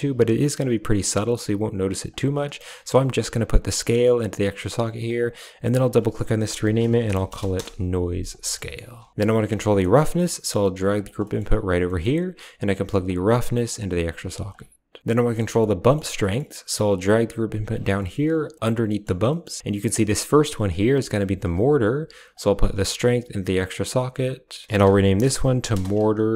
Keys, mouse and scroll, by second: 2.0 click, 3.6-4.3 drag, 4.9 click, 5.1-7.5 drag, 8.4 middle click, 9.4 click, 9.7 middle click, 10.2 g, 11.1 middle click, 11.8 middle click, 13.0-13.6 drag, 13.9 click, 14.2 g, 15.2 middle click, 15.6 middle click, 15.7 click, 16.0 middle click, 16.1 click, 16.5 g, 17.8 middle click, 18.3 middle click, 18.7 middle click, 19.1 middle click, 19.7-21.3 drag, 22.2-23.6 drag, 24.5-26.3 drag.